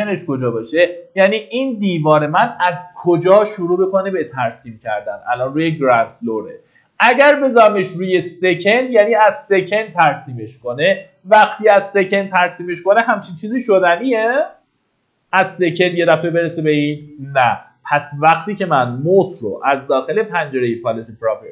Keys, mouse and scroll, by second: 1.5-2.1 scroll up 1, 6.1 click, 20.0-20.8 scroll down 1, 21.4-21.5 scroll up 1.